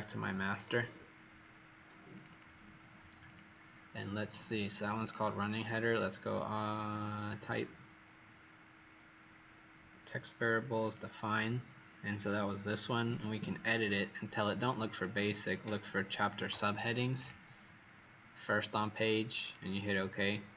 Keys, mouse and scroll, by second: 0.5 click, 2.2 click, 3.2 click.